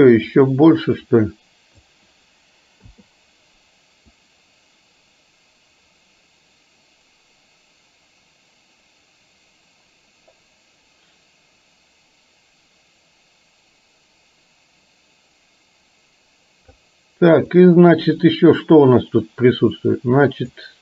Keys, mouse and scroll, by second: 0.5-1.9 drag, 4.2-16.9 drag, 17.6 click, 18.9-20.6 drag.